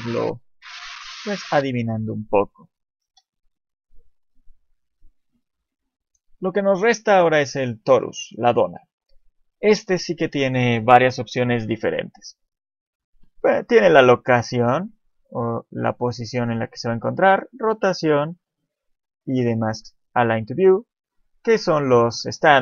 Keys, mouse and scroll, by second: 0.1 shift+middle click, 2.1 shift+middle click, 3.1 shift+a, 7.6 shift+middle click, 8.4 shift+middle click, 12.1 click, 17.6 scroll down 1, 18.2-18.9 scroll down 1, 18.9 click, 19.2 scroll down 1, 20.6 click.